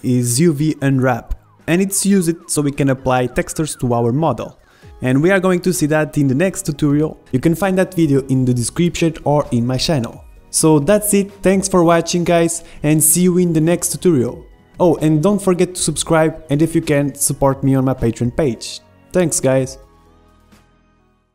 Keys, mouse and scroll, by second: 1.4 click, 1.4 right click, 2.7 click, 3.3-7.4 middle drag, 7.0-9.0 right drag, 7.4 click, 9.0 middle click, 11.3-13.7 middle drag, 14.8 middle click, 15.2-19.0 middle drag, 19.0 KP_1.